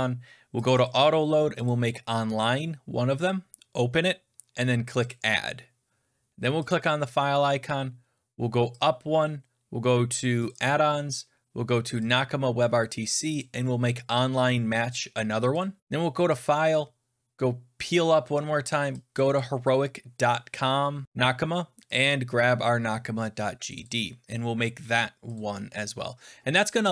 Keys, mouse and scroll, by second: 0.6 click, 0.8 click, 1.6 click, 3.2 click, 5.0 click, 6.6 click, 8.7 click, 10.4 click, 10.5 click, 11.8 click, 12.0 click, 13.1 click, 13.3 click, 15.5 click, 16.3 click, 17.8 click, 19.1 click, 19.3 click, 21.9 click, 23.6 click, 23.7 click, 25.3 click.